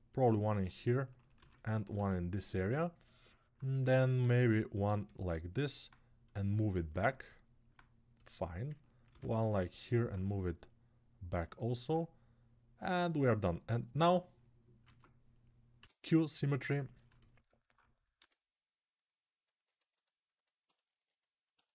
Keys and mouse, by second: 6.0-8.0 drag, 8.8 ctrl+r, 10.5-21.7 drag, 14.6 ctrl+Tab, 15.5 q, 17.9 g.